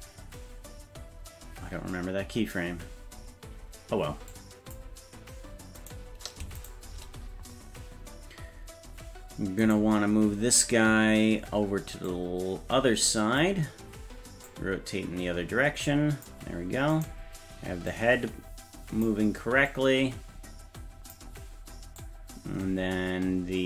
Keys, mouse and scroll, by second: 4.3 click, 5.9 right click, 6.6 shift+right click, 9.7 right click, 12.1-13.5 drag, 14.5-16.3 drag, 17.0 right click, 17.9-19.1 drag, 19.7-21.1 drag, 22.0-23.6 drag.